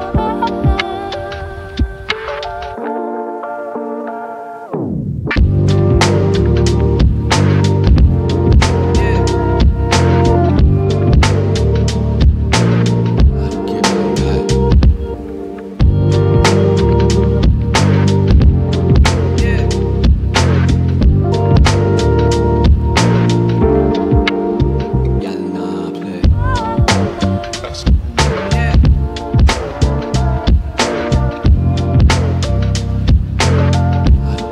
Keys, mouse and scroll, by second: 0.0-0.1 typing, 3.9 scroll down 1, 8.6 click, 12.6 click, 17.8 shift+right click, 18.5-18.9 scroll up 1, 19.9 click, 23.1 click, 24.6-25.0 scroll down 1, 25.8-34.5 drag.